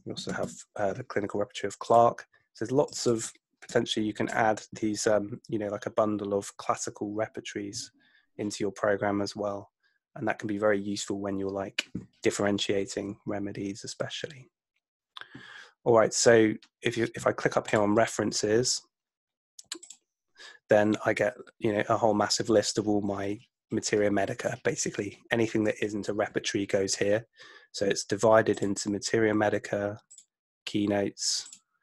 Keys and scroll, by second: 0.0-0.9 typing, 3.8 BackSpace.